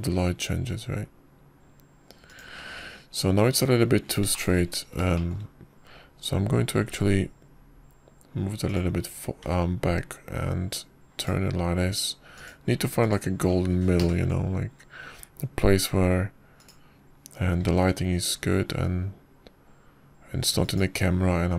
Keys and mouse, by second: 6.2 shift+middle click, 6.9 shift+middle click, 8.7 g, 11.3 r, 14.2 click, 14.9 click, 15.9 ctrl+KP_0, 18.4 click, 19.5 g.